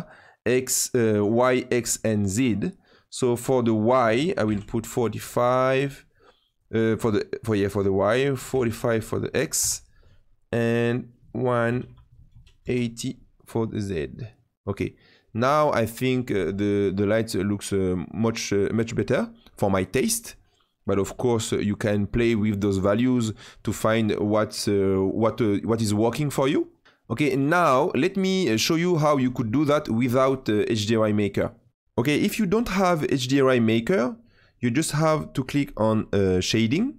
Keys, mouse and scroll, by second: 3.5 click, 6.4 click, 10.7 click, 31.7 n.